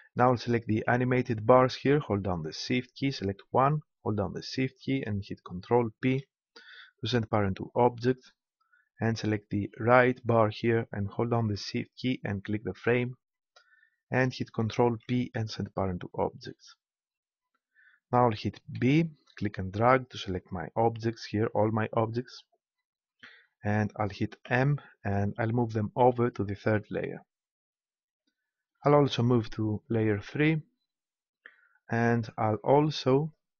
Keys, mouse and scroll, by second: 0.6-2.4 right drag, 4.4-6.1 right drag, 6.1 ctrl+p, 9.7 right click, 9.9-11.2 drag, 12.7-14.5 drag, 14.7 ctrl+p, 18.8 b, 24.4 m, 29.8-31.6 drag, 33.1-33.5 drag.